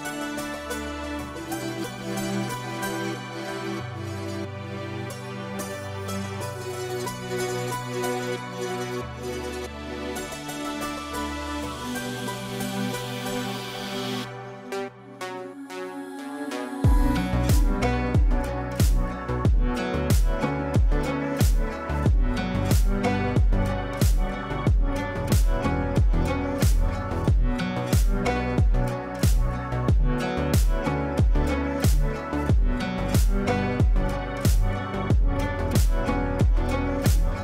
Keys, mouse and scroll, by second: 1.3 right click, 2.5 click, 3.4 F3, 3.9 F2, 4.3-5.3 drag, 8.6 c, 9.0-12.1 drag, 12.1-14.0 shift+drag, 32.9-35.5 drag.